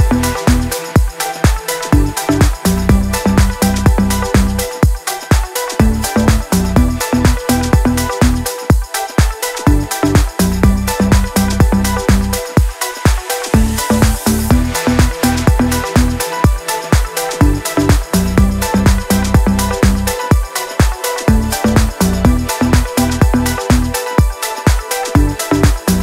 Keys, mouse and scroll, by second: 0.2 ctrl+v, 0.6 click, 5.1-7.9 drag, 9.2-11.8 drag, 12.3-15.9 drag, 17.5 scroll up 1, 18.1 click, 18.7 right click, 19.1 click, 21.6 right click, 21.8-26.0 drag.